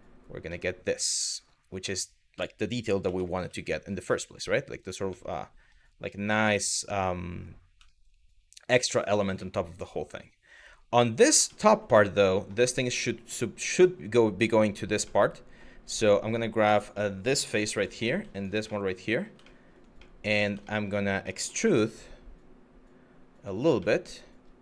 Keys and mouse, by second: 0.1-1.3 middle drag, 2.7 g, 3.0 y, 4.4 click, 4.7 middle click, 5.7-7.1 middle drag, 7.5 shift+middle click, 8.5 middle click, 9.1 middle click, 11.2 shift+middle click, 11.6 middle click, 14.8 middle click, 15.5 Tab, 15.9 click, 16.3 Tab, 17.3 3, 18.0 shift+click, 18.3 middle click, 19.1 shift+middle click, 19.7 middle click, 20.3 shift+middle click, 21.0 middle click, 21.3 e, 23.2 click, 23.5 middle click, 24.4 click.